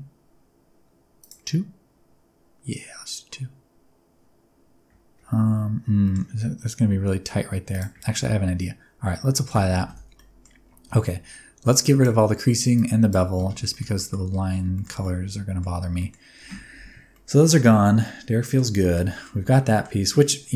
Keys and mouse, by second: 1.2 click, 6.1 middle click, 7.2 click, 7.2 middle click, 7.2 right click, 7.7 click, 9.5 ctrl+a, 9.9 Tab, 10.1 middle click, 10.9 a, 11.8 click, 12.8 click, 13.4 Tab, 13.7 shift+middle click, 14.0 middle click, 14.7 shift+middle click, 15.0-15.6 middle drag, 16.0 middle click, 16.4 Tab, 17.1 middle click, 18.0 middle click, 18.8 shift+middle click, 19.1 middle click, 19.3 Tab, 19.6 middle click, 20.1 alt+a.